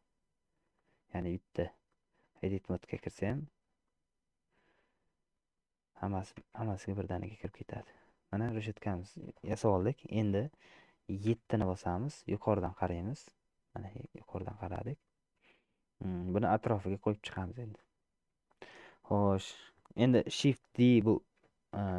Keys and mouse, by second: 0.9 click, 2.0 middle click, 3.3 Tab, 4.0-5.8 middle drag, 6.6 Tab, 7.7-9.1 middle drag, 11.4 KP_7, 14.2 shift+middle click, 15.2 shift+middle click, 18.6 shift+middle click.